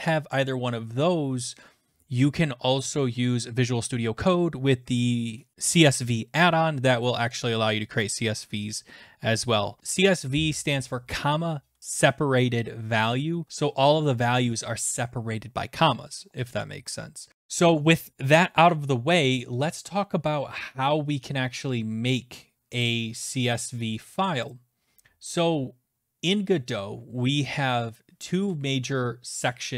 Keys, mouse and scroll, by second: 25.2 click.